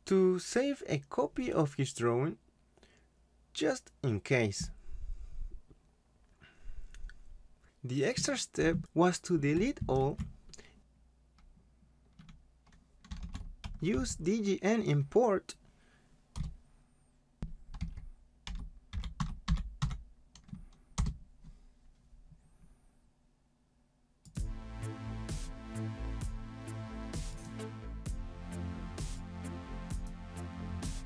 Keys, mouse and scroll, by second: 1.4 click, 1.9-3.3 typing, 4.0 click, 4.6 ctrl+c, 5.0 click, 6.1 ctrl+v, 7.2 click, 8.8 click, 9.9 ctrl+a, 13.0-13.9 typing, 16.3 Return, 18.1-20.3 typing, 21.0 Return, 24.2 click, 27.3 click.